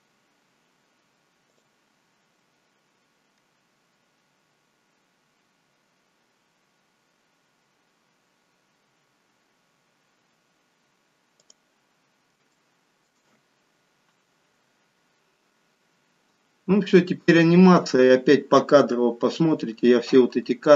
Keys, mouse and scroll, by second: 0.2-1.5 scroll up 1, 1.6 click, 11.5 click, 12.0-12.6 scroll up 2, 12.6 shift+middle click, 13.3-14.5 scroll up 1, 16.1-17.4 scroll down 2.